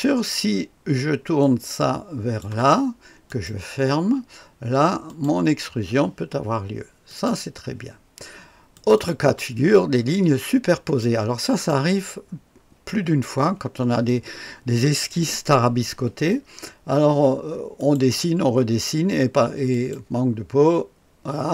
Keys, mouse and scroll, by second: 1.4-2.4 drag, 3.3 click, 5.0 click, 7.1 click, 8.7 click, 9.4 click, 9.9-10.8 scroll up 2, 11.0-11.7 right drag, 12.1 right click, 12.4-12.9 scroll up 2, 12.9 click, 13.2 right click, 17.7 click, 19.7 click.